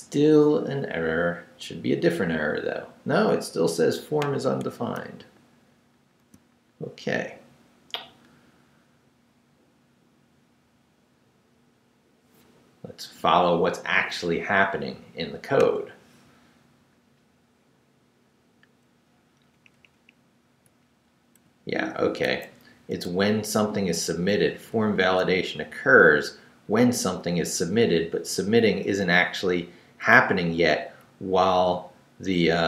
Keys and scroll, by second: 5.0 super+r, 19.3 Up, 21.4 Right, 22.3 Left, 22.5 Down, 23.1 Left, 24.7 Up, 25.3 Right, 28.1 Down, 29.2 Left, 31.1 Down.